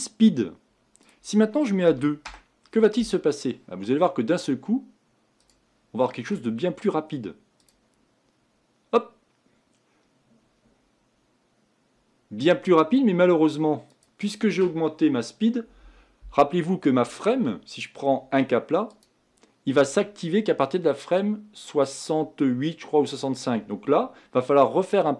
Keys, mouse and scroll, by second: 5.5 click, 6.1-7.7 middle drag, 7.7-10.7 drag, 14.1-19.1 drag.